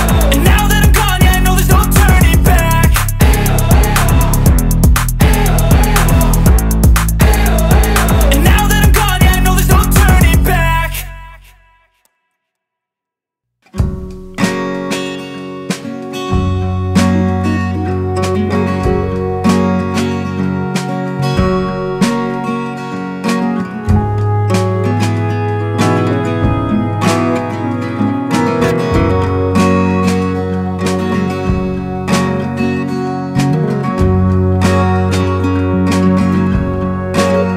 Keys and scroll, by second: 9.4 Return, 14.6 Return, 17.5 super+u, 28.3 Return, 32.0 super+u, 36.2 super+l.